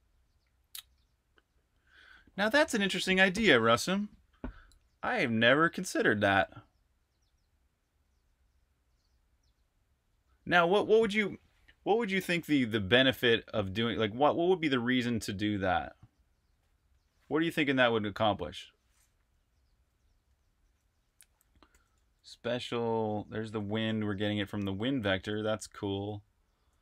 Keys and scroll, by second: 19.2 Escape, 20.0-20.4 typing, 21.5-23.4 typing, 24.9-26.8 typing.